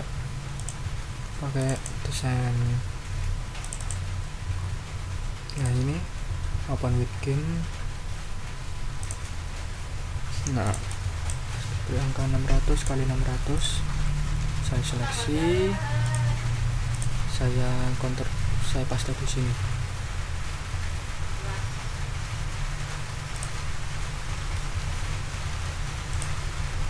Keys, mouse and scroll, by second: 0.6 click, 1.6 click, 3.6 click, 4.5-5.2 scroll down 2, 5.5 right click, 9.0 click, 10.6 click, 11.9 6, 12.1 0, 12.7 click, 13.5 click, 14.7 ctrl+a, 16.0 click, 16.9 click, 17.1 scroll up 2, 18.9 ctrl+v, 23.3 scroll up 2, 24.5 ctrl+a, 25.3 ctrl+c, 26.1 click.